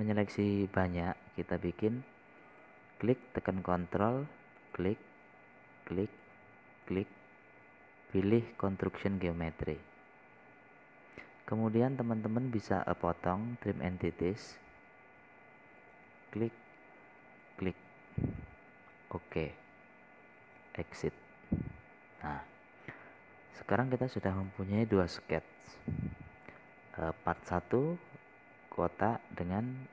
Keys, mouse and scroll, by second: 6.0 ctrl+click, 16.1 scroll down 1, 17.3-18.4 drag, 19.4-20.3 scroll up 1, 20.7 click, 23.6-24.0 scroll up 1, 25.2 middle click, 26.3 scroll down 1.